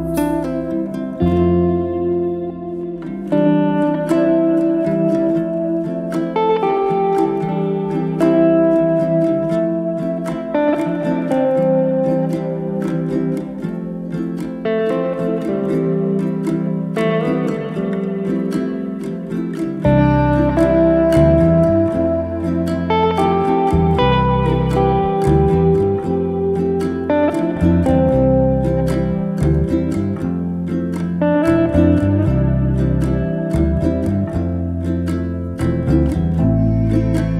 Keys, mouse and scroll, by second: 5.8 g, 6.1-7.0 middle drag, 7.0 j, 7.4 middle click, 8.3 3, 8.6 click, 9.5 Delete, 11.0 ctrl+z, 11.7 Delete, 12.8 click, 13.0 Delete, 13.6-14.5 middle drag, 14.5 click, 14.9-16.0 middle drag, 16.0 e, 16.9-17.6 middle drag, 17.6 scroll up 1, 17.9-19.1 shift+middle drag, 19.1 click, 19.7 click, 20.3 2, 20.4 click, 20.9 alt+click, 21.6 ctrl+x, 23.8 click, 24.4 shift+click, 24.6 middle click, 25.1 g, 28.6-30.1 middle drag, 30.2 KP_7, 30.8-31.1 scroll up 2, 31.1 shift+middle click, 31.4 scroll up 1, 31.6 click, 32.1 Tab, 35.5 ctrl+z, 36.0-37.2 drag, 37.2 Tab.